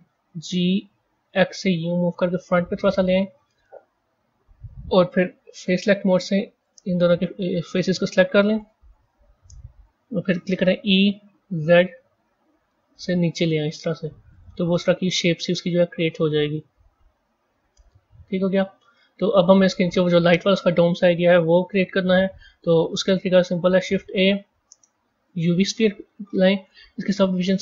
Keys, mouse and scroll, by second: 0.2 g, 5.5 click, 6.5 click, 7.6-8.9 middle drag, 8.9 KP_1, 10.5 e, 14.6-17.6 middle drag, 21.9-23.3 middle drag, 23.3 shift+a.